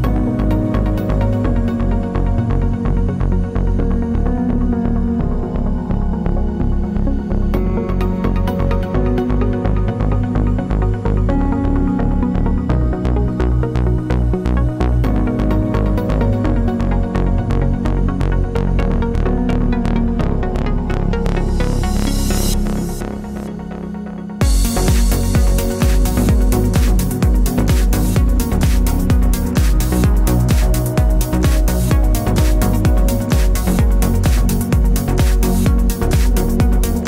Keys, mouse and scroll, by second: 0.8 click, 1.2-6.5 middle drag, 6.5 click, 7.0-8.3 middle drag, 7.5 shift+d, 8.3 click, 8.4-9.4 middle drag, 8.8 Tab, 9.4 click, 10.8 g, 12.4 click, 13.0-15.0 middle drag, 13.6 g, 15.0 g, 15.8-17.2 middle drag, 17.2 click, 17.9 g, 18.7 click, 18.9 g, 19.3 click, 19.7 g, 20.3 click, 20.4-23.1 middle drag, 21.9 Tab, 23.1 click, 23.2-24.6 middle drag, 23.9 r, 24.6 click, 24.8 z, 25.1-26.9 middle drag, 25.9 g, 26.9 click, 27.0-28.5 middle drag, 27.6 r, 28.5 click, 28.6-32.2 middle drag, 29.9 alt+d, 32.2 click, 32.8 shift+d, 34.0 click, 34.1 r, 35.3 click, 36.1-37.0 middle drag, 36.1 g.